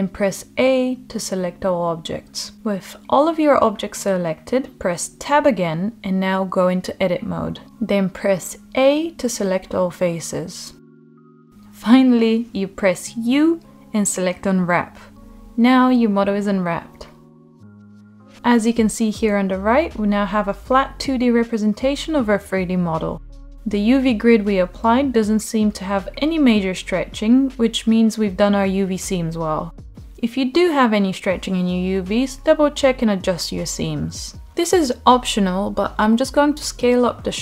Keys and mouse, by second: 4.3 Tab, 5.6-7.1 middle drag, 9.9 a, 13.2 u, 19.1 Tab, 20.3 Tab, 22.6 shift+click, 26.3 shift+click, 34.4 ctrl+l, 35.2 shift+click, 36.2 ctrl+l, 36.7 s.